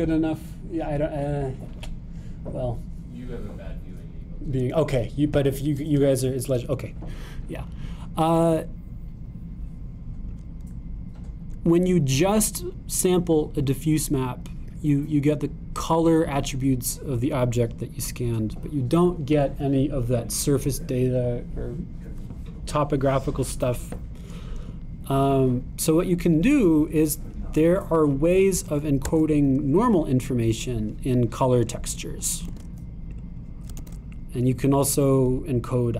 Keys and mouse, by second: 14.0-16.1 drag, 16.1-17.5 middle drag, 17.5-25.6 middle drag, 25.6-27.2 drag, 27.2 middle click, 27.7-29.4 drag, 30.0 x, 32.7 click, 33.5 shift+d, 34.8 shift+d.